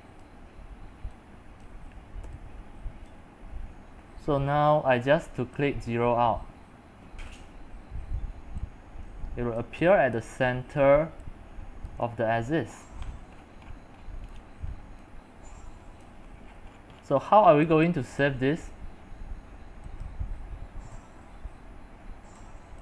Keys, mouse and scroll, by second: 0.2 click, 0.3 w, 1.6 c, 3.2 w, 5.6-8.5 drag, 8.5-12.0 typing, 12.9-15.2 scroll, 14.4 middle click, 15.2 x, 15.6 c, 16.2-17.2 middle drag, 16.2-17.2 scroll, 17.2 x, 17.7 click, 18.3 c, 18.3 c, 18.4 c, 20.1-22.8 drag.